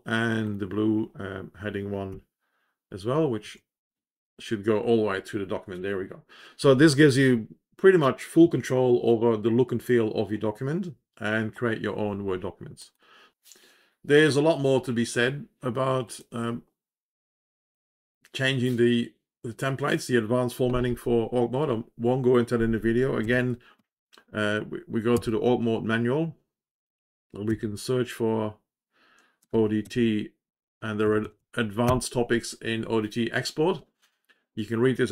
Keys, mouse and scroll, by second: 0.4 click, 2.4-3.2 scroll down 3, 3.7 Page_Down, 4.8 Page_Down, 12.8 click, 24.1 ctrl+r, 28.2-30.2 typing, 30.9 Down, 31.1 Down, 31.3 Down, 32.4 g.